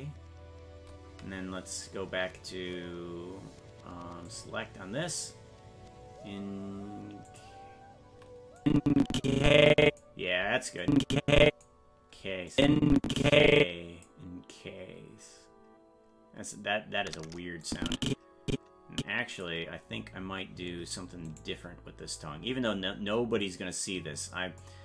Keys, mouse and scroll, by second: 4.3 click, 7.3 click, 8.6-10.0 drag, 10.8 click, 12.5-14.1 drag, 17.7-19.5 drag, 21.7 right click, 23.4-24.7 drag.